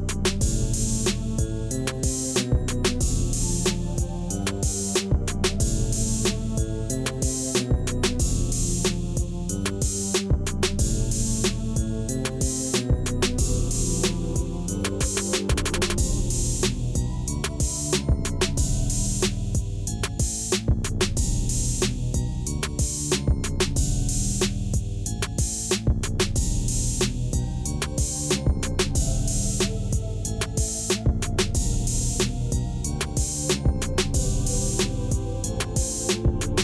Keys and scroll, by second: 1.1 Tab, 2.3 ctrl+b, 3.6 v, 5.3 ., 5.5 3, 6.1 Return, 7.8 3, 8.9 shift+g, 23.1 Tab, 23.7 g, 25.1 shift+a, 26.1 Tab, 26.7 s, 27.1 0, 27.2 Return, 27.6 Tab, 30.7 b, 31.0 Return, 35.3 ., 35.5 0, 35.9 Return.